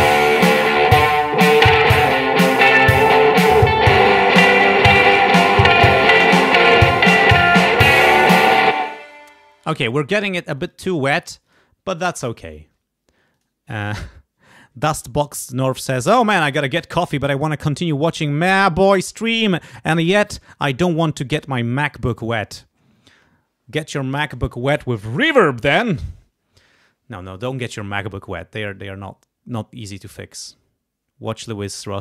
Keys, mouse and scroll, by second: 4.6-5.3 scroll down 2, 5.3-5.6 scroll up 2, 8.7 space, 10.6 click, 11.5 click, 12.3-12.9 scroll up 2, 13.3 click, 22.8 scroll down 2.